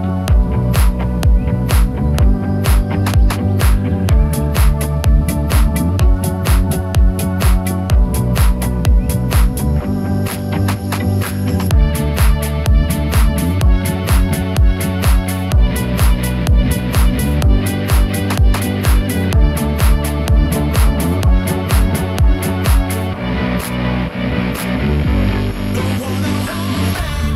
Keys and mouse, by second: 0.5 ctrl+click, 0.9 shift+click, 1.3 click, 2.0 right click, 2.6 alt+s, 3.7 middle click, 4.3 shift+click, 4.4 shift+click, 4.7 middle click, 5.1 3, 5.3 click, 5.9 click, 5.9 middle click, 6.8 shift+click, 7.3 click, 7.3 middle click, 7.3 right click, 8.4 shift+middle click, 9.8 i, 11.9 1, 18.5 1, 19.3 3, 19.7 click, 20.5 1, 21.4 shift+middle click, 21.6 shift+click, 22.9 m.